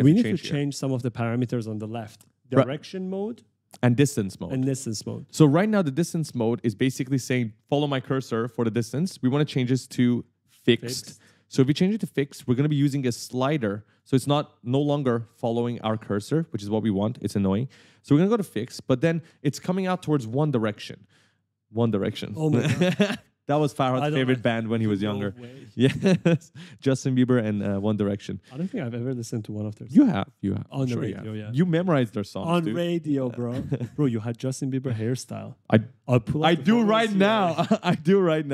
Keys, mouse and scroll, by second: 11.2 click, 12.2 click, 13.6 click, 16.7 click.